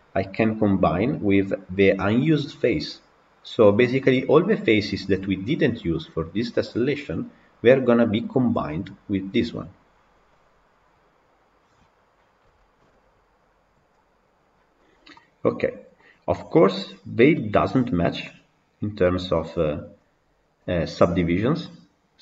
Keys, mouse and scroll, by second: 13.8 click, 14.6 scroll up 1, 15.0-16.7 middle drag, 16.7-17.0 scroll up 2, 17.2-22.2 middle drag.